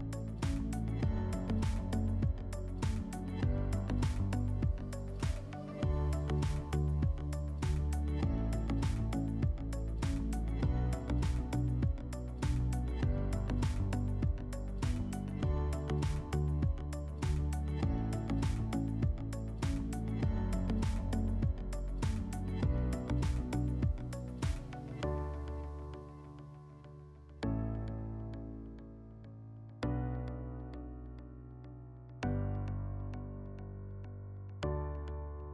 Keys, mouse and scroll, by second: 1.9 click, 3.7 click, 6.5 click, 8.2 click, 9.3 click, 12.8-14.2 drag, 14.6 ctrl+click, 14.9 ctrl+click, 17.4-18.9 drag, 20.2 click, 22.7 click, 23.9 scroll, 26.4 click, 27.8 click, 28.7 click, 29.7 click, 31.2 click, 33.3 click.